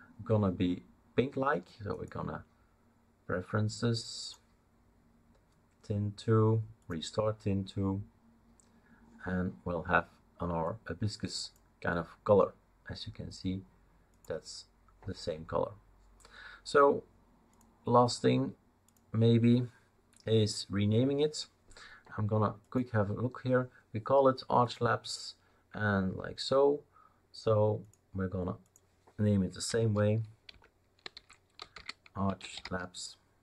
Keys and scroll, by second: 29.7 F2, 30.5 Left, 30.8-33.4 typing.